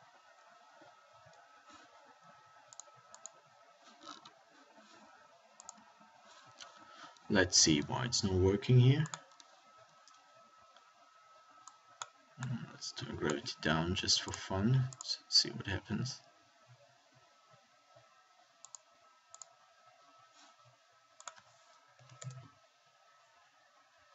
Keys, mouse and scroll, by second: 1.1 alt+a, 3.3-4.8 drag, 15.4-16.7 drag, 18.9-20.8 middle drag, 20.8-23.0 drag.